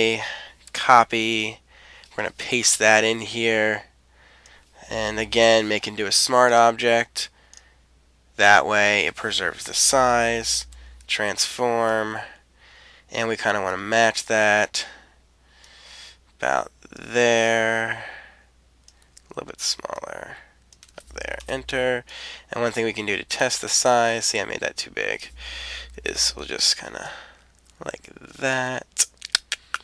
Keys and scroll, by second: 0.6 super+c, 2.4 super+v, 10.5 super+t, 21.4 Return, 25.9 super+t.